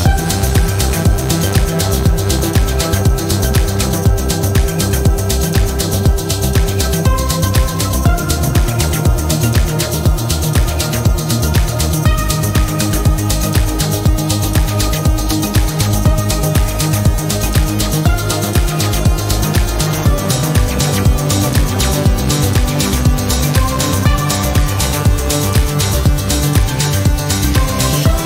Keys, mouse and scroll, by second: 0.8 click, 2.3 click, 5.3 click, 6.4 0, 6.9 click, 7.9 4, 8.5 0, 10.1 click, 12.0 scroll down 2, 12.9 scroll up 2, 14.3 click, 15.3 click, 16.7 click, 17.8-26.7 drag, 27.2-28.2 drag.